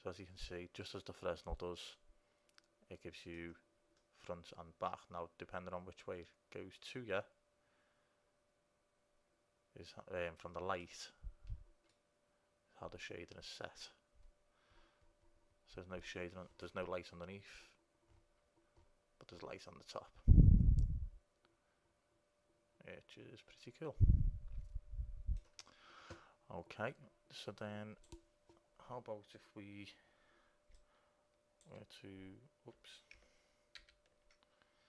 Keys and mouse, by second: 4.4-6.7 middle drag, 12.5 middle click, 15.9 middle click, 27.8-29.6 drag, 30.9-34.1 drag, 34.1 ctrl+z.